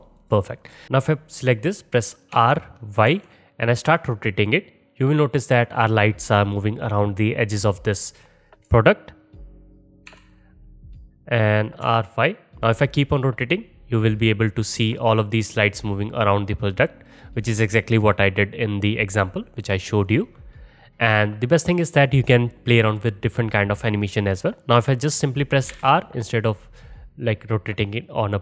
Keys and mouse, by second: 0.2 click, 0.3 middle click, 0.8 ctrl+z, 2.3 r, 8.7 middle click, 8.7 t, 8.8-28.4 middle drag, 10.1 r, 25.7 r.